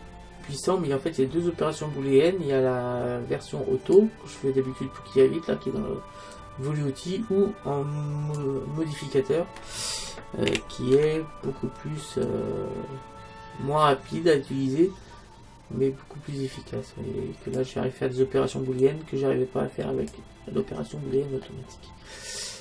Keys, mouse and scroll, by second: 6.4-8.3 drag, 10.5 a, 11.0 b, 19.0-20.7 drag, 20.7-22.6 middle drag.